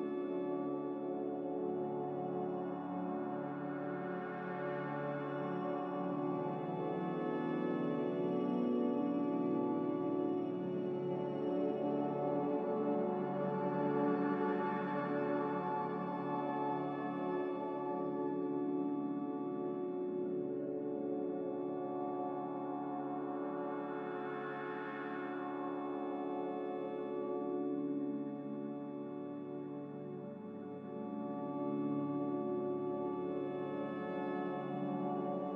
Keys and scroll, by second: 25.8 a, 27.5 z, 31.7-32.6 typing.